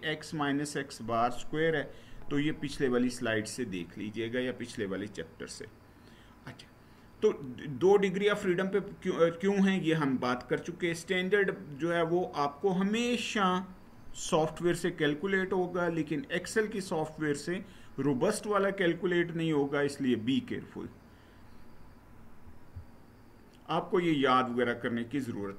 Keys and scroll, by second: 22.1 Down.